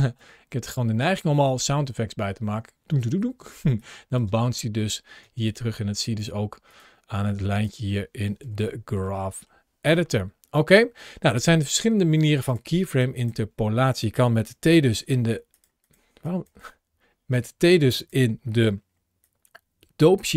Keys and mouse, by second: 0.0 space, 0.4-0.9 drag, 3.6-4.0 drag, 5.3 click, 7.1-7.5 drag, 8.3 Home, 9.0 middle click, 12.3 click, 12.8 click, 14.3 t, 14.9 t, 15.4 click, 16.1 drag.